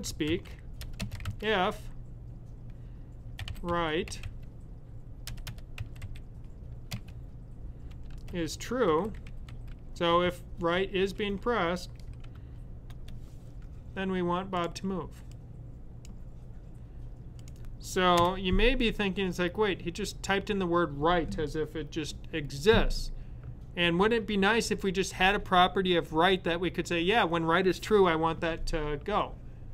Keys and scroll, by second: 0.0-0.7 typing, 3.1-5.9 typing, 7.8-9.9 typing, 11.0 typing, 12.4 typing.